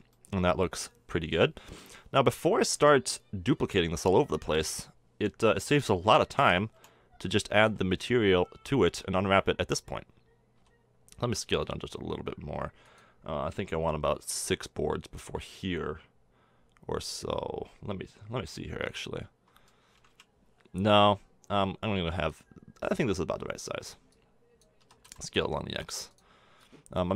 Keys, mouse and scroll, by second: 2.3 KP_7, 6.4 s, 10.6 s, 19.0-20.1 middle drag, 20.1 KP_7, 23.6-24.8 drag, 24.8 s, 26.6-27.1 drag.